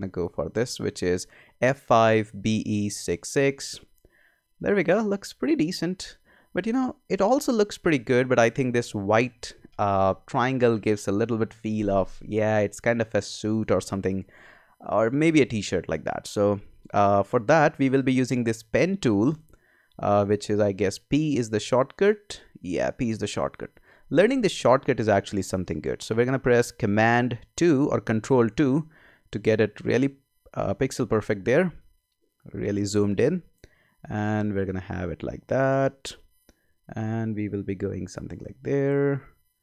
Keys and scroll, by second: 27.9 super+2.